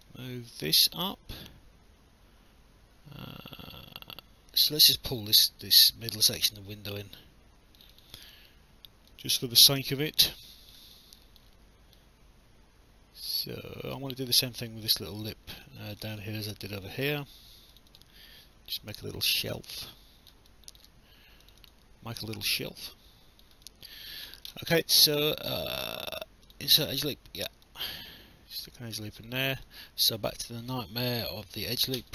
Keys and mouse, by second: 0.0 click, 7.8 click, 9.1 click, 10.9 alt+click, 12.0 click, 15.0 alt+click, 15.5 alt+middle click, 16.8 alt+click, 19.0 click, 20.5 alt+click, 23.6 alt+click, 25.2 click, 26.5 click, 27.6 click, 29.6 alt+click, 32.0 Escape.